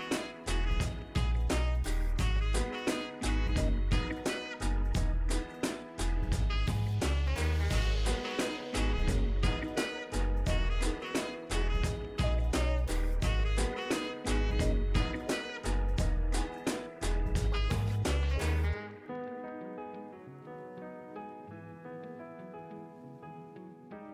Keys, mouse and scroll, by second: 1.6 ctrl+Num_Lock, 1.6 scroll down 1, 1.9 ctrl+d, 5.3 click, 6.9 scroll down 1, 7.3 scroll up 1, 8.7-19.1 drag, 20.4-20.9 scroll down 1, 20.9 scroll up 1, 21.8 click.